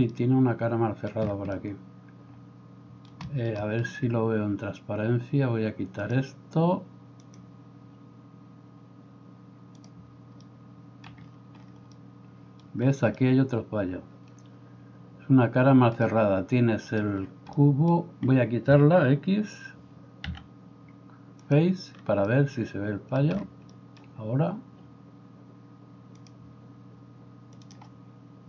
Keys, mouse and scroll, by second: 14.7 right click, 20.3 x.